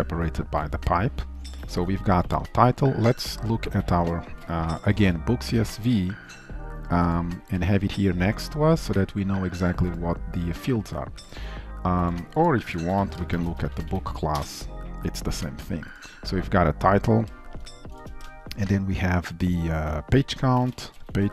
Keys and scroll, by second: 5.5 ctrl+shift+n, 12.9 ctrl+n.